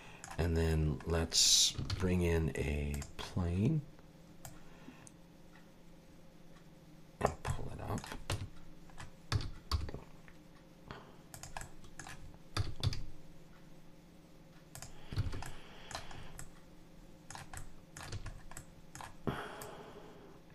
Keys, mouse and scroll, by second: 1.9 shift+a, 3.3-3.8 scroll down 2, 4.4 click, 7.5 middle click, 8.3 Tab, 9.3 s, 11.6 middle click, 12.5 s, 15.2 alt+a, 15.4 middle click, 16.1 scroll up 3, 16.4 middle click, 17.6 middle click, 18.1 a, 18.3 scroll up 2, 18.6 middle click, 19.6 click.